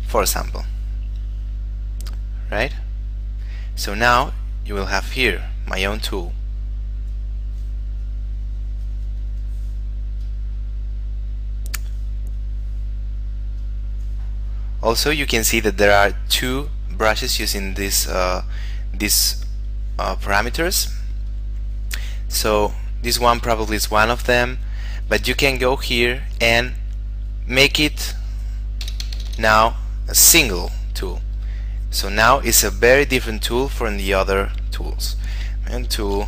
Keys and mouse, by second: 2.8 click, 7.4 click, 10.5 click, 20.0 click, 29.1 BackSpace, 35.2 space.